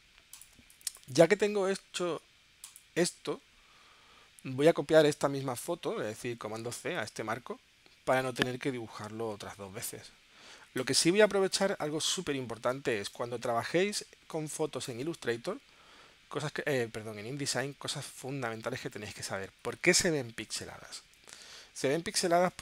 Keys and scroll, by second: 0.5 space, 6.8 super+c, 11.1 space, 12.7 space, 14.4 space, 22.5 space.